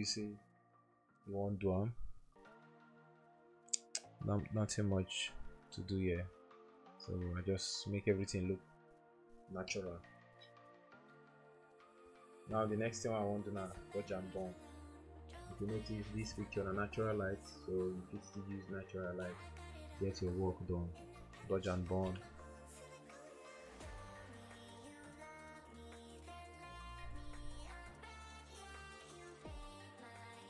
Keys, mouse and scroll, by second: 0.4 typing, 2.6-4.5 typing, 4.7 double click, 6.4-12.3 typing, 16.4-18.1 typing, 21.3 click, 21.4-29.3 typing.